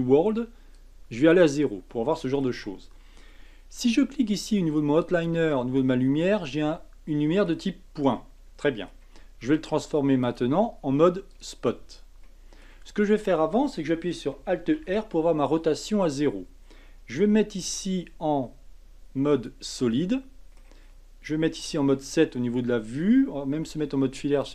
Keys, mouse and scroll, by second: 0.7-1.9 drag, 1.9-5.0 middle drag, 5.0 click, 6.5-10.2 middle drag, 10.2 click, 11.3 click, 12.2-14.7 middle drag, 14.7 alt+r, 17.6 z, 19.9-21.6 middle drag, 21.6 KP_7, 22.3 scroll down 2, 23.6 z.